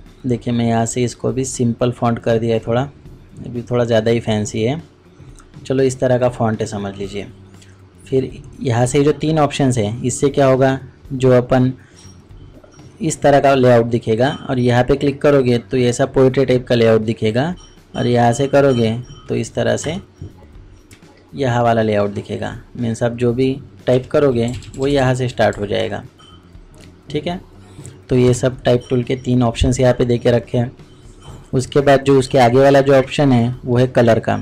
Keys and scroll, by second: 30.5 typing.